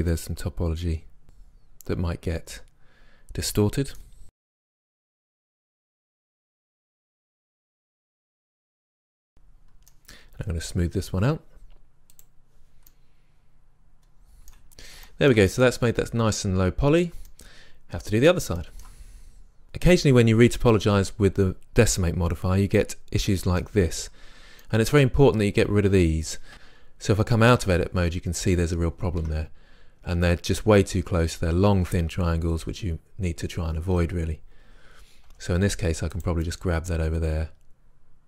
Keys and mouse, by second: 3.2-4.4 middle drag, 4.4-5.3 drag, 4.8 g, 5.3 middle click, 5.5 click, 6.5-7.3 drag, 6.5 g, 9.0 right click, 12.2-12.9 drag, 12.9-14.1 middle drag, 14.9 middle click, 19.6 right click, 20.5-22.8 middle drag, 24.0-24.7 middle drag, 24.9-26.5 middle drag, 26.5 Tab, 29.3 Tab, 32.9-35.3 drag, 35.3 g, 36.3 drag, 36.5 middle click.